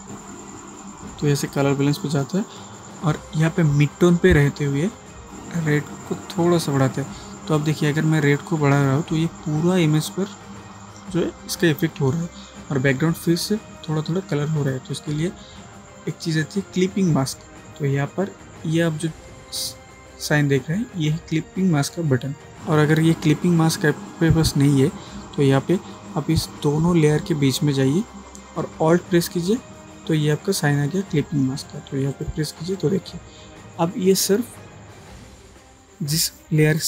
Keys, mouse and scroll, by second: 1.5-15.0 drag, 32.2 alt+click.